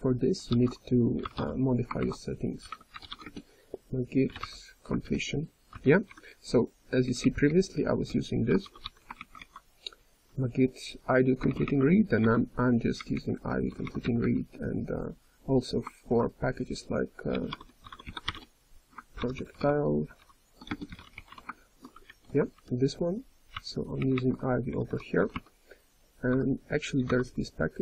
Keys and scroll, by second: 0.0-1.9 typing, 0.4 ctrl+g, 1.9 ctrl+s, 4.9 ctrl+n, 8.0-8.8 typing, 11.5 Return, 11.5 ctrl+n, 11.5 ctrl+a, 11.5 ctrl+e, 11.5 ctrl+space, 11.5 ;, 11.7 ctrl+., 12.1 ctrl+e, 12.9 ctrl+a, 13.6 d, 14.0 x, 15.8-16.6 typing, 19.1 ctrl+p, 19.3 ctrl+p, 19.6 ctrl+p, 22.0 BackSpace, 22.5 ctrl+n, 23.5 Return, 23.9 ctrl+a, 24.4-26.2 typing.